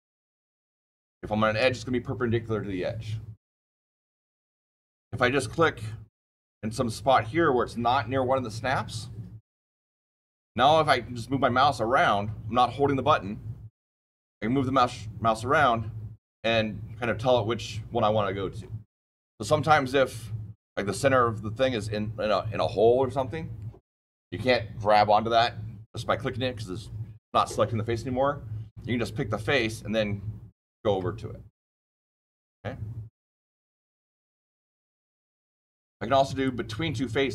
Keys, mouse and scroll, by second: 5.8 shift+middle click, 6.2 shift+middle click, 9.5 click, 34.3-36.2 scroll down 1, 36.2 click.